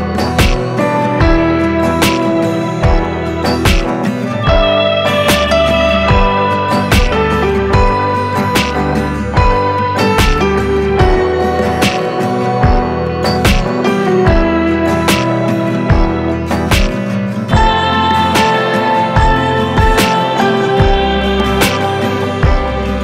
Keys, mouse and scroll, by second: 3.6-6.6 drag, 6.5 Delete, 8.0 ctrl+space, 9.9-11.8 drag, 18.6-23.0 drag.